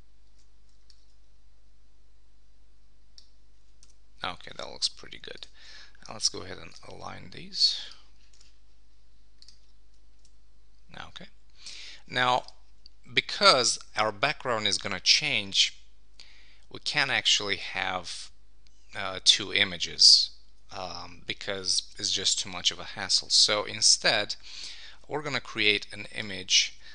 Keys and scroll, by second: 0.2 super+t, 3.8 Return, 8.6 super+s, 12.2 super+s.